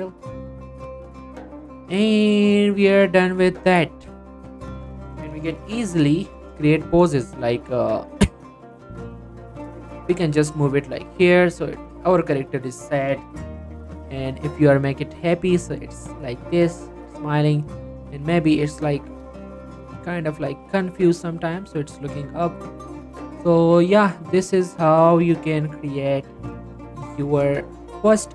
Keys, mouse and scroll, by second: 0.3 click, 0.6 middle click, 1.0 scroll down 1, 1.2 middle click, 1.4-1.8 scroll up 1, 1.8 middle click, 2.8 scroll down 1, 3.0 middle click, 3.3-3.6 scroll up 1, 3.6 middle click, 4.4-6.3 scroll up 1, 6.6 click, 7.0 scroll down 1, 7.1 middle click, 7.4 scroll up 1, 8.2 click, 8.8 g, 11.1 click, 11.3 scroll down 1, 11.6 click, 11.8 scroll down 1, 12.1 middle click, 14.4-14.9 scroll up 1, 14.9 click, 15.1 g, 16.0 click, 16.8-17.2 scroll down 1, 17.7 click, 18.0 g, 19.3 click, 19.8 g, 21.3 click, 21.6 scroll down 1, 21.8 click, 22.4-23.3 scroll down 1, 23.3 click, 23.4 g, 25.1 click, 25.2 g, 26.1 click, 26.3-26.6 scroll down 1, 26.6 click, 26.9 middle click, 27.3 shift+middle click, 27.6 scroll up 1, 27.6 middle click.